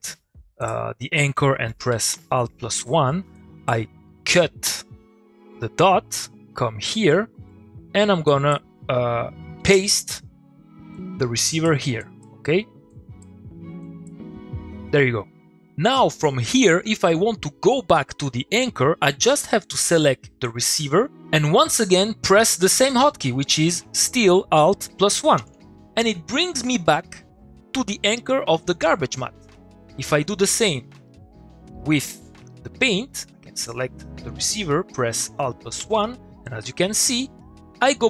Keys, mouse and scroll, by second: 0.6 click, 2.8 middle click, 3.3-4.0 click, 4.6 x, 5.1-5.6 scroll down 1, 5.6 middle click, 6.5-7.3 scroll up 1, 7.3 middle click, 8.3 click, 10.9-11.9 ctrl+v, 20.1 click, 25.2 click, 25.4 alt+1, 30.0 middle click, 30.1 click, 30.3 middle click, 31.8 click, 35.3 click, 35.8 alt+1.